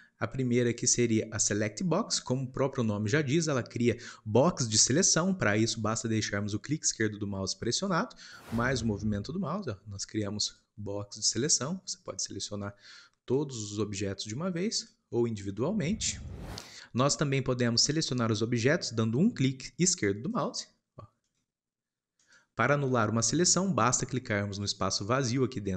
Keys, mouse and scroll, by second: 0.0-2.3 shift+middle drag, 2.3 scroll down 2, 3.1-9.8 shift+middle drag, 9.8 click, 11.4 click, 16.1 click.